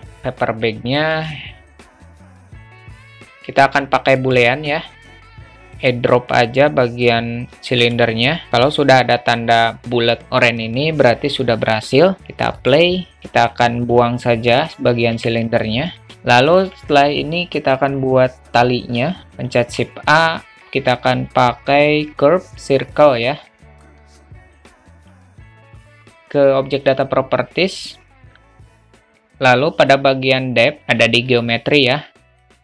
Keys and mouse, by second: 1.2-4.4 drag, 12.2 click, 15.1 Delete, 16.0 alt+middle drag, 16.4 alt+shift+middle drag, 19.5 shift+a, 24.2-25.1 drag, 31.3 click, 32.4 click.